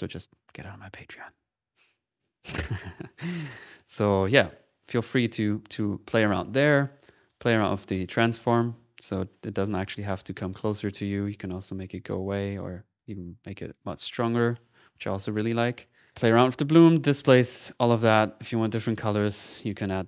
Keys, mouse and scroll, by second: 0.5 middle click, 1.3-2.9 drag, 3.0 click, 3.3-5.0 middle drag, 5.4 middle click, 5.7 click, 7.4 click, 8.4-13.3 drag, 13.6 click, 14.3 click, 15.5 click, 16.3 middle click, 16.6 click, 17.4 click, 17.7 click, 18.0 click, 18.6 click, 19.3 click, 19.3 middle click, 19.4 click.